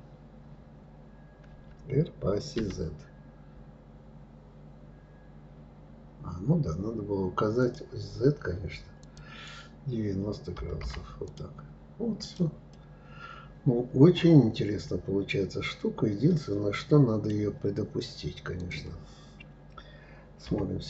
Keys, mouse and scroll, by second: 8.7-11.0 drag, 11.9 click, 12.4-15.4 middle drag, 18.2 click, 20.1 KP_3.